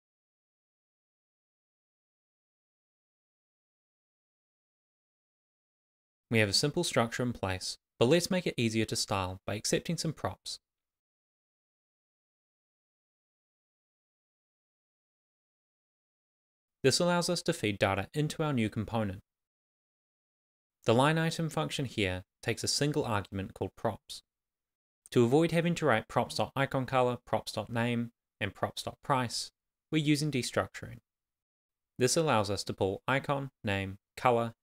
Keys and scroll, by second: 0.0 shift+,, 0.5 shift+., 1.3 shift+,, 1.6 shift+., 2.3 Up, 2.5 Down, 2.7 Left, 5.3 alt+3, 6.1 shift+3, 7.4 Up, 7.6 Right, 8.5-9.5 typing, 10.5 Up, 12.6 super+s, 17.2 shift+[, 18.1 shift+c, 21.2 shift+[, 21.3 shift+], 21.4 Left, 23.0 shift+[, 23.6 shift+], 25.4 shift+[, 25.6 Right, 26.5 shift+[, 27.0 shift+], 27.2 Left, 28.8 Left, 29.3 Right, 33.2 shift+c.